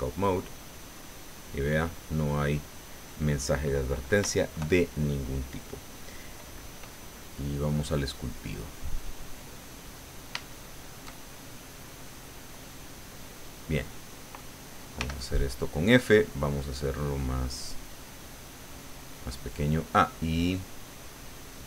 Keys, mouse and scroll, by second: 0.1 click, 8.1 click, 9.0 click, 9.8-11.1 middle drag, 11.2 shift+middle click, 11.2-13.2 shift+drag, 15.0 f, 15.6 click, 16.6 click, 17.1-18.2 drag, 19.2 middle click.